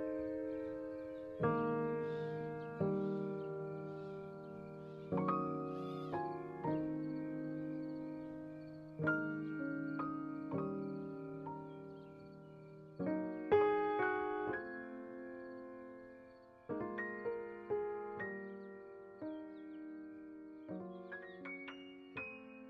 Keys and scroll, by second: 2.1 9, 2.6 5, 3.1 Return, 3.7 z, 4.7 x, 7.7 z, 8.9 x, 10.4 1, 10.6 0, 10.7 3, 10.9 Return, 11.7 alt+x, 13.8 9, 15.6 BackSpace, 16.0 5, 16.4 Return, 16.9 alt+x, 18.6 1, 18.8 0, 19.0 Return, 20.8 n, 21.3 space.